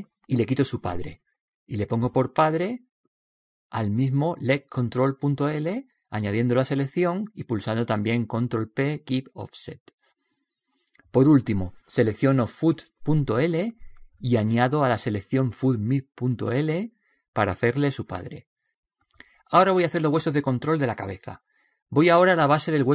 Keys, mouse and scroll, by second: 1.7 click, 6.5 right click, 8.4 ctrl+p, 10.8 right click, 14.1 right click, 18.7 right click, 20.2 ctrl+p, 22.5-22.9 middle drag.